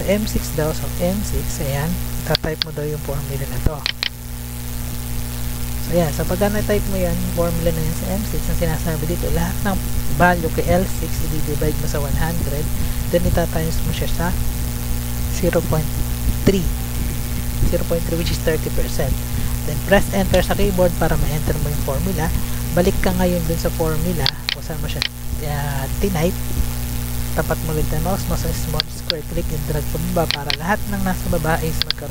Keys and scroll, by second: 0.4 Tab, 1.7 Tab, 4.1 ctrl+c, 4.9 Tab, 5.2 F2, 5.7 ctrl+v, 6.7 BackSpace, 20.2 Return, 21.1 Up, 22.0 Down, 22.3 Up.